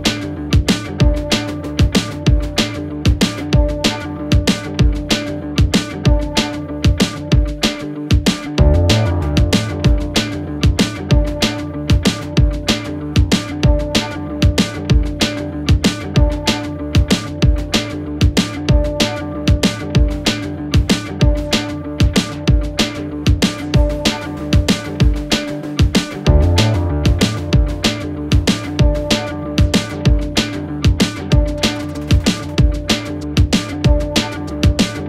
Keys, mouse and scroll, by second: 6.6-9.1 drag, 11.1 click, 14.4 click, 18.4 click, 22.0 click, 23.8-31.9 drag.